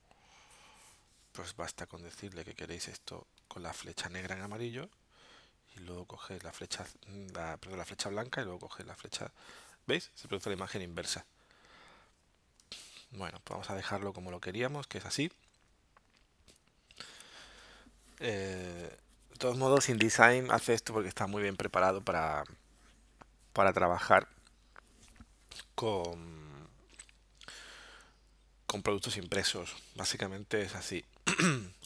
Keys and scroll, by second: 4.5 v, 12.8 super+z, 13.5 super+z.